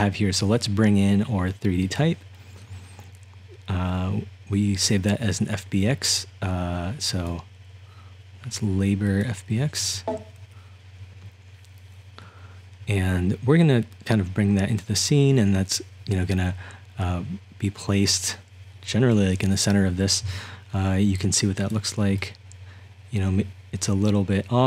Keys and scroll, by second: 21.1-24.6 typing.